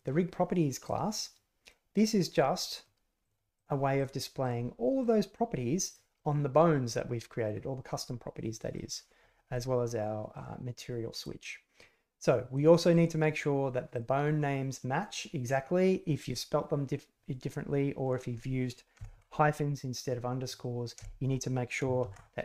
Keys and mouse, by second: 0.8 click, 1.1 middle click, 1.9 middle click, 3.2 middle click, 3.5 click, 3.9 click, 4.4 click, 5.0 click, 5.3 click, 5.8 middle click, 6.1 middle click, 6.9 middle click, 8.7 middle click, 10.3 click, 11.2 middle click, 12.2 middle click, 12.8 click, 13.9 click, 18.0 click.